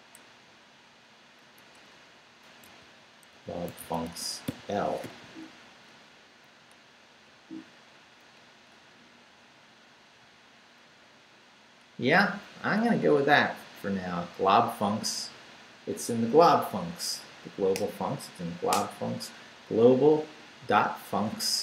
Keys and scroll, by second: 0.1 BackSpace, 1.6 BackSpace, 2.7-5.0 typing, 5.2 Down, 5.9 Up, 6.9 Down, 7.7 Up, 9.4 Down, 10.8 Up.